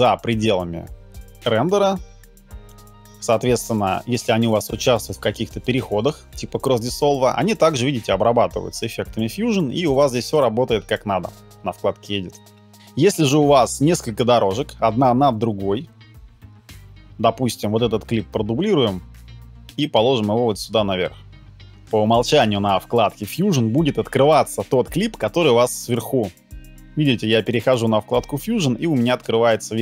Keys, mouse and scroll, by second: 18.2 alt+click.